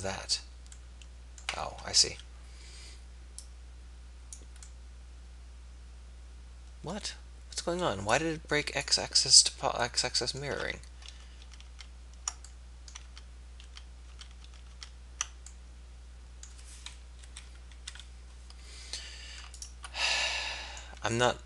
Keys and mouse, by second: 0.1-1.3 middle drag, 2.2 KP_3, 10.7 ctrl+z, 11.0 ctrl+z, 11.4 ctrl+z, 11.6 ctrl+z, 13.0 ctrl+z, 13.6 ctrl+z, 14.2-14.8 ctrl+z, 17.3 KP_1, 17.9 KP_3.